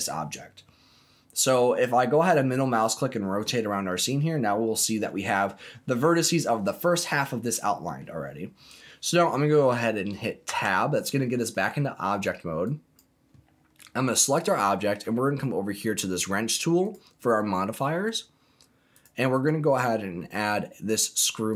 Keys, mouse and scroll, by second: 0.0-0.5 scroll down 2, 0.5-3.7 middle drag, 3.8 scroll down 1, 4.3 middle click, 5.1 scroll down 1, 7.3 middle click, 8.2-8.9 scroll up 3, 8.9-9.3 scroll down 2, 9.3 middle click, 10.4 Tab, 11.5 middle click, 12.6 click, 13.7 middle click, 16.8 click, 18.9 click, 19.3-21.5 drag.